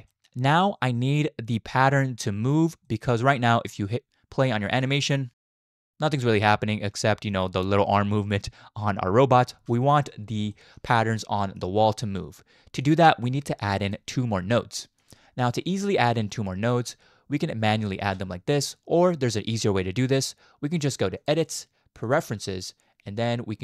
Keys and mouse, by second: 0.1 shift+middle drag, 0.7-1.5 middle drag, 2.0-2.5 middle drag, 2.8 middle click, 3.9-4.5 drag, 4.7 space, 5.2-6.4 middle drag, 6.1-6.4 drag, 6.1-6.4 right drag, 6.8 shift+middle click, 7.0-7.3 shift+drag, 9.5 space, 9.8 shift+middle drag, 10.5 shift+middle drag, 11.4 middle click, 12.8-13.9 drag, 15.0 click, 15.5 middle click, 16.1 click, 18.0 shift+a, 21.1-22.2 drag.